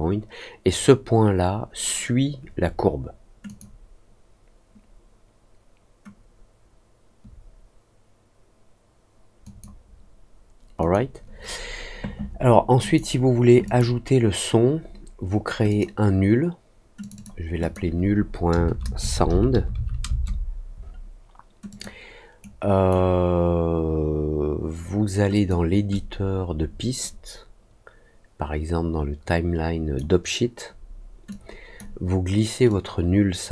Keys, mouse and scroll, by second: 3.4 click, 9.4 click, 10.7 click, 12.8 click, 13.6 click, 15.6 click, 16.9 click, 17.1 click, 17.5 click, 21.6 click, 22.3 right click, 25.3 click, 25.9-29.9 drag, 31.2 click, 32.6-33.5 drag.